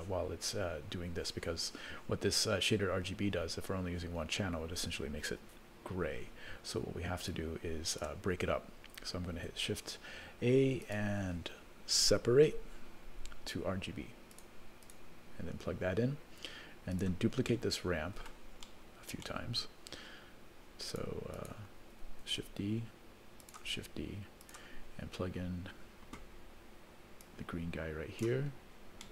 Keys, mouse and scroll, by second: 7.3 click, 9.4 shift+a, 16.9 click, 17.5 middle click, 18.1 middle click, 19.0 middle click, 19.2 scroll down 3, 19.3 middle click, 20.9 click, 21.3 click, 22.3 shift+d, 23.7 shift+d, 27.2-28.2 drag, 28.5-29.1 scroll down 3, 29.0 middle click.